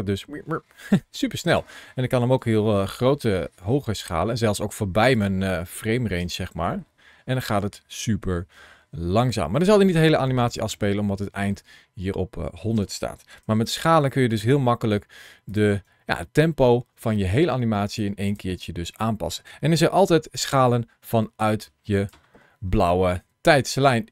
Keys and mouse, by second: 0.8 space, 1.4 click, 2.2 s, 5.0 click, 6.1 space, 12.6 space, 13.3 s, 14.2 right click, 18.1 click, 19.9 ctrl+shift+a, 19.9 shift+c.